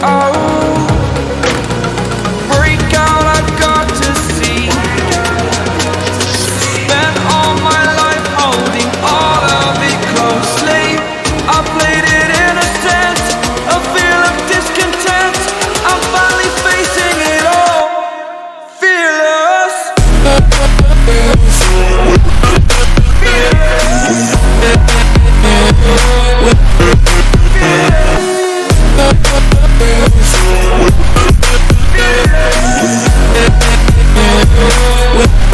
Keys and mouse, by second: 0.8 click, 2.0-3.1 drag, 3.5 click, 6.7 Return, 8.0 click, 9.0 click, 10.2-11.2 drag, 11.4 click, 12.2 click, 13.6 click, 15.3 click, 16.6 click, 18.6 click, 20.9 click, 22.0 right click, 22.6 click, 23.4 click, 24.8 click, 25.6 click, 28.1 ctrl+t, 30.4 shift+click, 32.0 click, 34.5 Down, 34.9 Down, 35.3 Right, 35.4 Right.